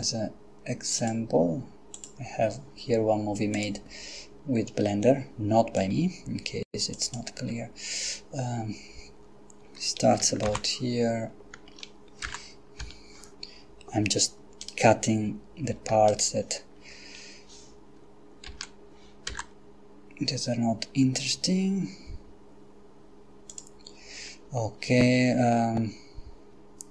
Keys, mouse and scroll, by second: 1.0 click, 1.9 click, 3.6 click, 5.8 click, 6.9 click, 10.5 shift+k, 12.2 x, 12.9 Return, 14.7 right click, 16.1 shift+right click, 18.5 g, 19.3 x, 23.5 click.